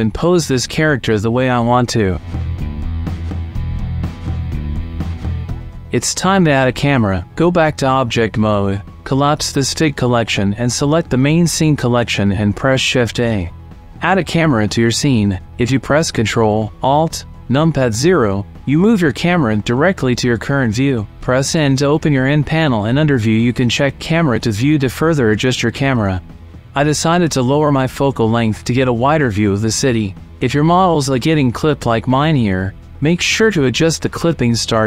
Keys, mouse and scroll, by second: 0.0 shift+click, 0.5 click, 0.7 click, 0.8 ;, 1.7 r, 2.1 z, 2.2 click, 2.9 click, 3.1 click, 3.3 r, 3.6 click, 3.7 middle click, 3.9 middle click, 4.1 r, 4.5 middle click, 5.0 r, 5.6 middle click, 6.0 shift+middle click, 6.1 middle click, 7.0-8.0 drag, 8.0 right click, 9.9 right click, 12.4-13.2 drag, 13.3 shift+a, 16.5 ctrl+alt+KP_0, 21.0 n, 22.1 click, 23.1 click, 25.1 click, 26.4 click, 27.7 click, 29.7 shift+middle click, 30.4-31.0 ctrl+middle drag, 34.2-34.8 drag.